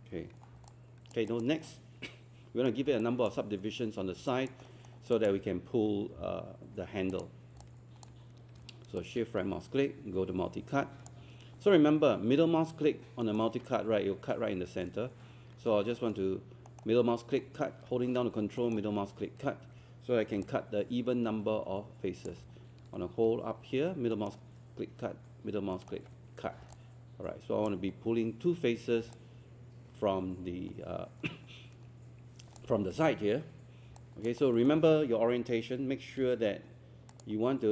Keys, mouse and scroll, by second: 0.5 scroll up 1, 0.7 alt+click, 1.3 alt+click, 3.0 alt+click, 4.3 alt+click, 5.1 alt+click, 7.1 click, 7.6 alt+click, 9.0-11.2 shift+right drag, 13.2 ctrl+middle click, 16.7 ctrl+middle click, 18.6 ctrl+middle click, 24.1 ctrl+middle click, 25.7 ctrl+middle click, 26.7 alt+click, 29.1-32.6 alt+drag, 34.0 alt+click, 34.4 alt+middle click, 36.2 ctrl+1, 36.4 scroll up 1, 37.1-37.7 drag.